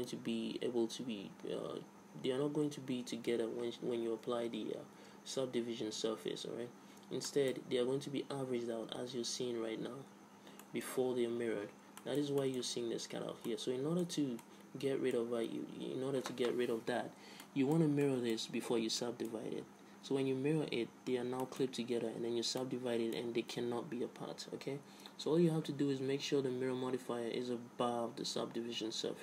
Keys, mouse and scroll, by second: 7.5-9.4 middle drag, 10.9-12.8 middle drag, 12.5 Tab, 14.4-16.5 middle drag, 15.7 Tab, 17.7-18.9 middle drag, 18.9 Tab, 20.7 Tab, 21.3 Tab, 23.0-24.7 middle drag.